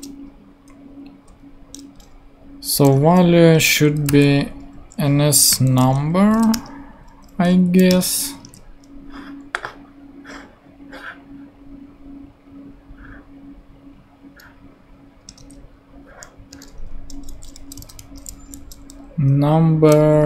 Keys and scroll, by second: 2.9 [, 3.8 shift+[, 4.4 shift+n, 5.5-7.0 typing, 7.6 Down, 7.9 Return, 8.4 super+Tab, 15.4 super+Tab, 17.5-18.5 typing.